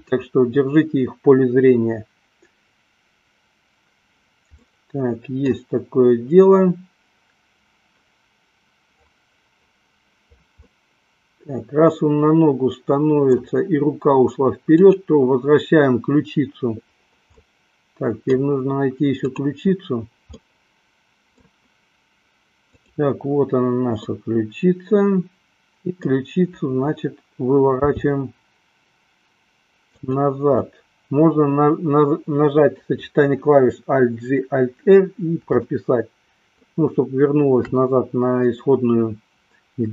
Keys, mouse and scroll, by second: 0.1 drag, 5.0 middle click, 5.6 scroll down 1, 10.8-13.7 middle drag, 15.0 click, 17.7-19.0 middle drag, 19.5 click, 20.7-21.8 middle drag, 23.5 click, 24.2-26.5 middle drag, 27.7 r, 31.0-33.2 middle drag, 36.0-38.1 shift+middle drag.